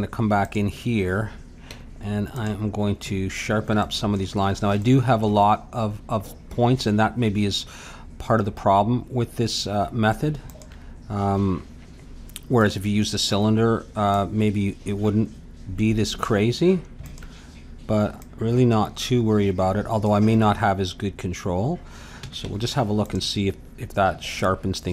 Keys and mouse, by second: 0.4-2.3 drag, 1.7 Tab, 3.8-10.3 middle drag, 10.5-16.2 drag, 17.0-20.1 drag, 22.2 a, 22.4 Tab, 23.6 middle click.